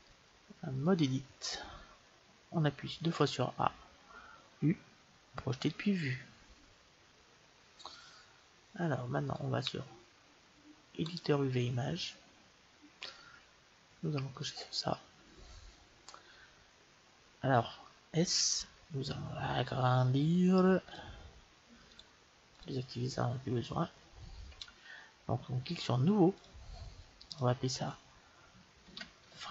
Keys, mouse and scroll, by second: 2.4 a, 2.8 a, 4.3 u, 9.1-11.0 drag, 14.2-16.1 drag, 18.1 s, 21.8-23.6 drag, 26.2-28.2 drag.